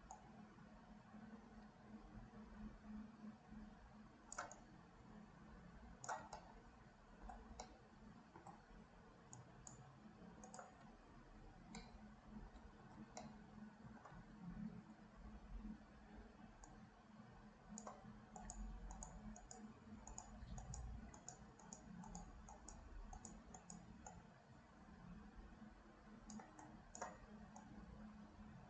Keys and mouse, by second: 0.2-4.6 right drag, 4.7-6.2 shift+right drag, 6.5 middle click, 7.8 middle click, 9.4 shift+right click, 12.0 middle click, 13.3 shift+middle click, 16.9-18.0 drag, 18.6 click, 19.1 click, 19.5 click, 20.2 click, 20.7 click, 21.2 click, 21.7 click, 22.2 click, 22.7 click, 23.5 click, 24.2-26.5 drag, 26.7 click, 27.6-28.6 right drag.